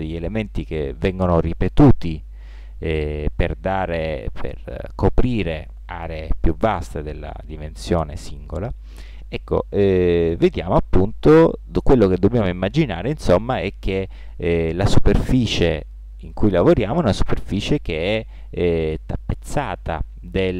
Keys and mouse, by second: 7.9-20.5 drag.